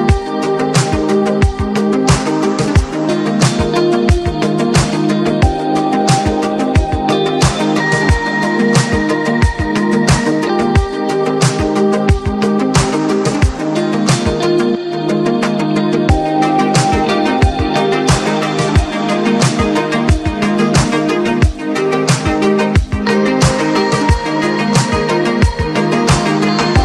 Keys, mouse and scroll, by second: 1.6-4.5 drag, 4.8-8.4 drag, 10.1-11.5 drag, 11.5 alt+scroll up 1, 11.9 alt+scroll down 1, 12.6 right click, 13.7 click, 13.7 click, 14.3 scroll down 1, 15.2 click, 15.9 alt+scroll down 1, 16.6-26.8 drag, 18.0 typing.